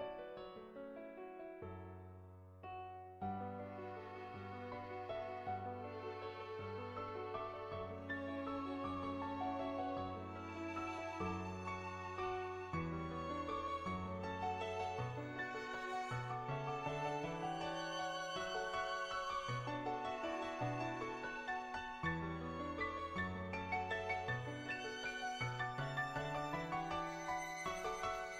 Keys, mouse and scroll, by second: 0.3 click, 1.0 ctrl+z, 1.6 click, 2.1 click, 2.4 click, 2.8 click, 3.1 click, 4.1 click, 4.6 ctrl+z, 4.8 click, 5.4 click, 5.8 click, 7.8 click, 8.5 click, 9.4-10.8 drag, 10.9 click, 11.3 click, 11.6 click, 11.9 right click, 12.0 right click, 13.8-15.9 middle drag, 16.1 middle click, 16.5 Tab, 17.0 click, 17.2 middle click, 17.8 shift+click, 19.7 middle click, 20.2 g, 20.8 click, 21.7 click, 22.4 ctrl+z, 22.9 ctrl+z, 22.9 ctrl+click, 23.2 middle click, 23.6 shift+middle click, 24.0 shift+middle click, 24.5 middle click, 25.1 shift+middle click, 25.5 click, 27.0 middle click, 27.5 middle click, 27.9 Tab.